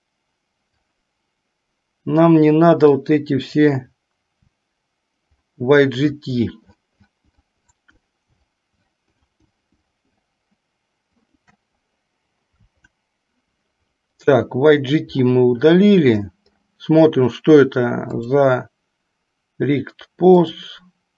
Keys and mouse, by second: 3.0 click, 11.3 shift+click, 13.2 Delete, 18.1 click, 20.5 click.